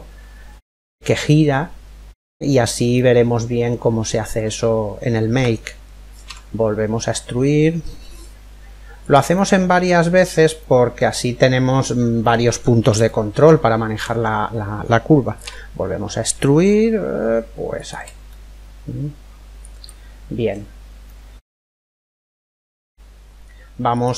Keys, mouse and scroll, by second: 2.6-4.4 middle drag, 5.9 e, 8.9-14.3 middle drag, 14.3-14.6 scroll down 1, 14.6-15.7 middle drag, 14.9 e, 17.9-19.7 middle drag, 20.6-24.0 middle drag, 23.5-24.1 right drag.